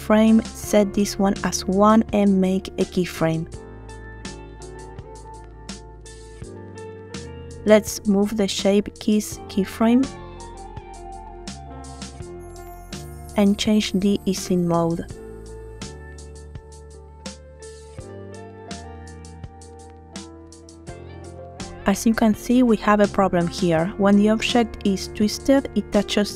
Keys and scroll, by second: 1.5 |, 10.4 space, 15.7 space, 17.0 space, 20.7 space.